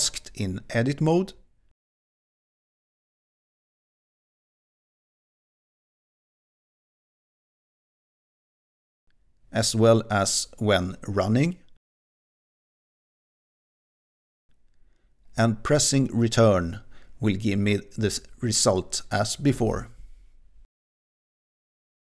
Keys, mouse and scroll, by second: 0.5 click, 1.9-6.9 typing, 10.1 click, 12.5-16.2 typing, 16.9 Return.